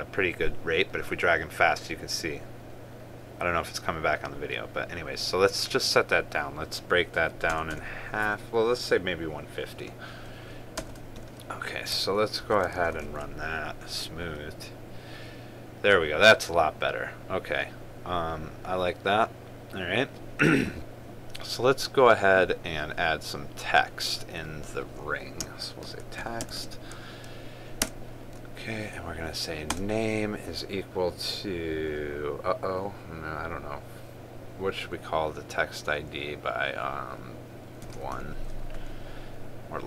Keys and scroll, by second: 13.2 ctrl+s, 13.7 ctrl+r, 27.2 ctrl+space.